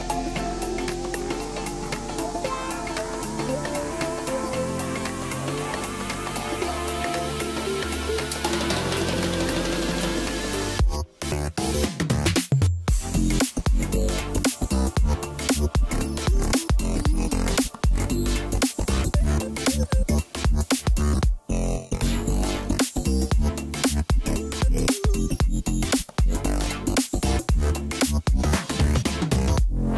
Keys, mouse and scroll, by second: 0.0-3.1 drag, 3.6-4.2 scroll down 6, 4.2 middle click, 4.8 scroll down 2, 5.0-5.8 middle drag, 5.8 KP_1, 6.4-6.7 scroll down 2, 7.4-8.1 scroll up 4, 8.1-8.5 middle drag, 8.9 Tab, 9.4-10.0 middle drag, 10.0 drag, 10.3 scroll up 2, 10.6 Tab, 11.8 s, 14.8-16.7 middle drag, 16.7 Tab, 17.0-17.4 scroll down 3, 17.6 KP_1, 18.2-18.9 scroll down 5, 19.8-20.4 scroll up 4, 20.4-20.9 middle drag, 20.9-21.4 scroll up 1, 21.5 click, 21.9-22.4 middle drag, 22.4-22.7 scroll up 1, 23.3-26.4 drag, 26.5-27.5 scroll down 7, 27.5 KP_1, 28.1-28.9 scroll down 3, 28.9-29.7 scroll up 7, 29.7-29.9 middle drag.